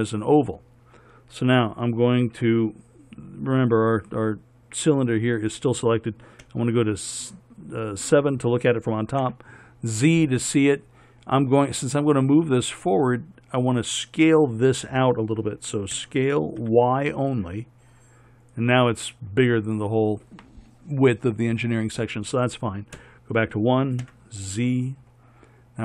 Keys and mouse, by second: 6.7 KP_7, 9.4 z, 16.2 s, 23.2 KP_1, 24.2 z.